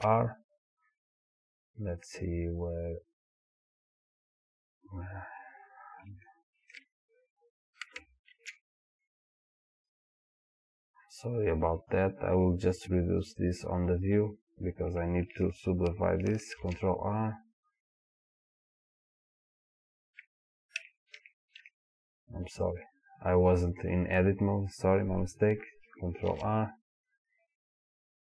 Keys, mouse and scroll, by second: 5.3-5.7 scroll up 1, 6.3-9.8 shift+middle drag, 7.0 scroll up 1, 7.3-8.3 scroll down 1, 8.3 ctrl+r, 9.8 click, 12.8-14.3 drag, 16.6 ctrl+r, 18.8 click, 20.8 Tab, 22.7 click, 26.3 ctrl+r.